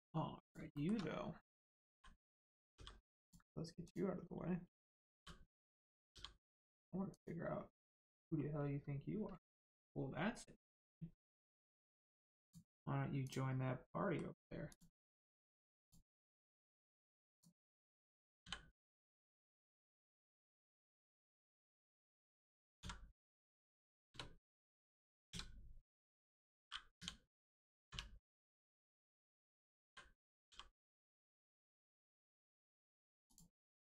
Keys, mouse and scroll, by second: 0.0-0.4 scroll down 1, 0.4 click, 0.7 shift+middle click, 0.9-1.3 scroll down 1, 1.8 l, 2.7 g, 3.2 click, 5.1 click, 5.1 l, 6.0 g, 6.5 click, 7.7 middle click, 8.3-10.0 scroll up 1, 13.1 click, 13.8 middle click, 14.3 scroll up 1, 14.6 click, 15.4-15.7 scroll down 1, 15.7 click, 16.1 middle click, 17.3 click, 18.3 l, 20.9 click, 22.7 v, 24.4 click, 25.2 a, 26.0 click, 27.8 u, 28.5 click, 29.8 l, 30.4 g, 31.1 click, 32.1 Tab, 32.4 click, 33.5 middle click, 33.8 right click.